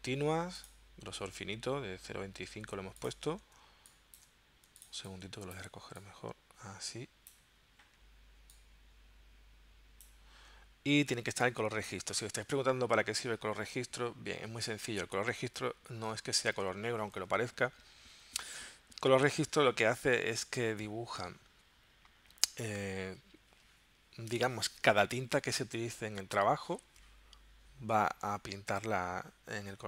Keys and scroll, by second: 3.6 space, 5.0 space, 17.0 super+c.